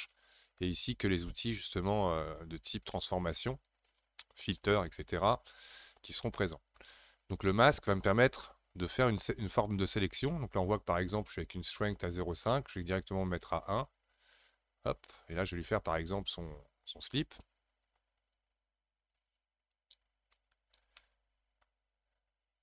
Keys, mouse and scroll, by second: 2.3-6.3 scroll down 14, 6.3 middle click, 7.3-8.3 scroll up 2, 8.3-8.9 scroll up 1, 8.9-21.0 drag, 21.0-22.6 middle drag.